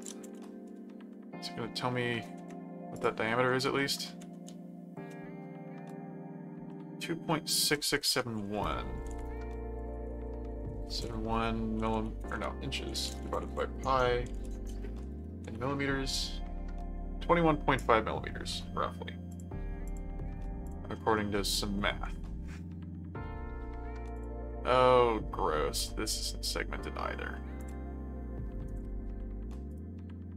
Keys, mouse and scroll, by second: 0.2 m, 2.9 click, 3.1-4.8 typing, 6.7-7.8 middle drag, 8.8-15.5 typing, 19.3 click, 20.6 click, 20.9 middle click, 24.1 click, 24.5 middle click, 27.6 click, 28.7 right click, 29.7 right click.